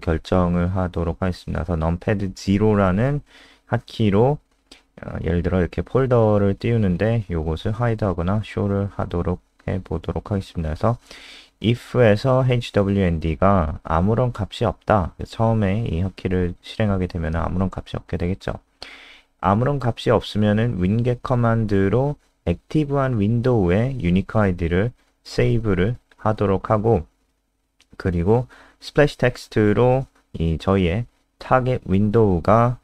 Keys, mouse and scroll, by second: 0.1 Down, 0.9 F3, 3.7 click, 4.9 ctrl+w, 5.1 click, 5.7 Right, 5.9 Up, 8.0 Return, 8.1 Return, 8.3 Up, 9.3-11.8 typing, 13.7 Right, 14.0 Return, 14.3 {, 14.8 Return, 17.0-21.4 typing, 21.7 Escape, 24.4 Return, 26.8-28.6 typing, 30.1 Down, 30.2 Down, 30.6 Tab, 31.1 ctrl+Left, 31.7 Left, 32.1 ctrl+shift+Right, 32.5 BackSpace, 32.6 BackSpace.